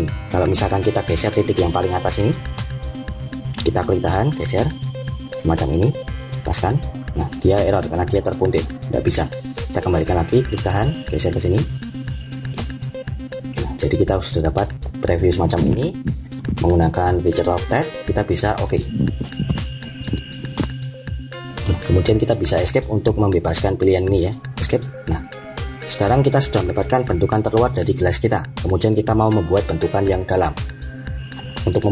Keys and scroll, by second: 22.5 Escape.